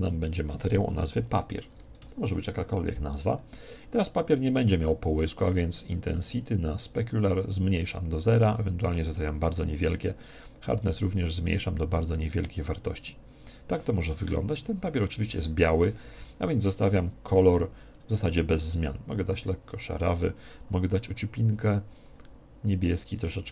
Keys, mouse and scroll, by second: 5.4 click, 8.4-11.5 drag, 17.1 click.